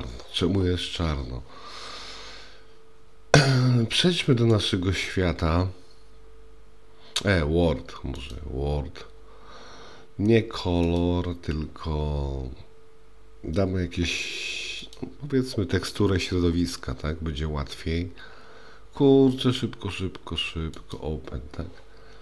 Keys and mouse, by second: 4.8 click, 10.9-15.0 drag, 20.8 click.